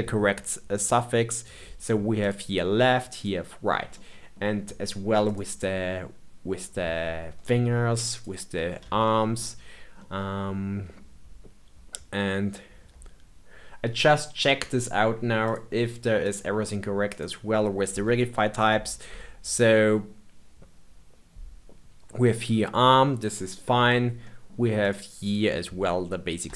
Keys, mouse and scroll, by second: 2.1 click, 3.1 click, 3.9-5.2 middle drag, 5.2 click, 8.1 click, 9.0-12.9 shift+middle drag, 15.4-17.1 drag, 18.0-18.9 scroll down 7, 18.9 scroll down 3, 23.1-24.7 middle drag, 24.7 click.